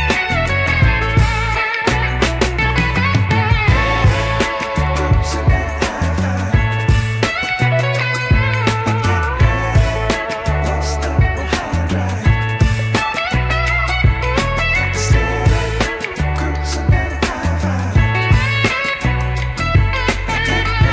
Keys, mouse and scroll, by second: 0.4 scroll up 2, 0.6 shift+middle click, 1.1-1.7 scroll up 1, 1.7 scroll up 1, 1.9 alt+click, 2.6 x, 4.3 alt+click, 5.5 x, 6.9 alt+click, 7.6 x, 9.5 alt+click, 10.2-10.5 scroll down 3, 10.5 shift+middle click, 11.6 ctrl+b, 20.3 ctrl+z, 20.8 click.